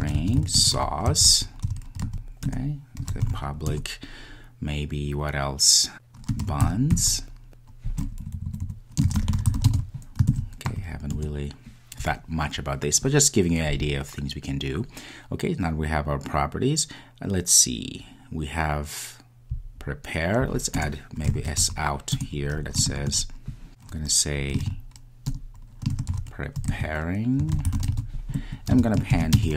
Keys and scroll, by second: 3.7 Return, 22.1 Return, 22.8 Return, 23.6 shift+Return.